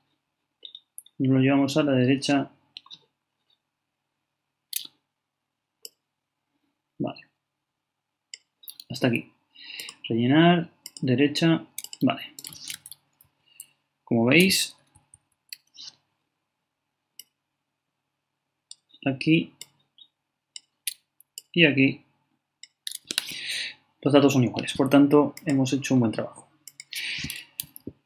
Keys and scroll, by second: 13.2 super+Down, 14.9 super+Up.